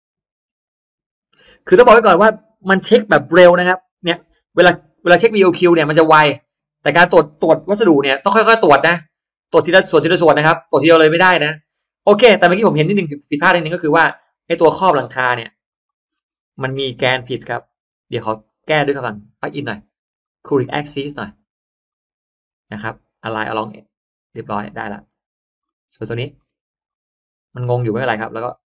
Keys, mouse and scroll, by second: 7.2-8.2 drag, 8.9 click, 10.5 click, 11.8-12.4 scroll up 1, 12.1 middle click, 12.4 scroll down 1, 12.8-13.8 scroll up 3, 13.2 middle click, 13.2 space, 13.8 click, 14.6 shift+click, 15.6 shift+click, 16.0-16.3 shift+scroll down 1, 16.6-17.0 middle drag, 17.4 shift+click, 18.4 shift+click, 20.1-20.5 drag, 20.9 click, 21.8 click, 22.4 right click, 23.4 click, 24.4 middle click, 24.4-24.8 scroll up 1, 25.0 scroll down 1, 25.1 middle click, 25.5 middle click, 25.9 space, 26.2 middle click, 26.6 middle click, 26.8 click, 28.3 click.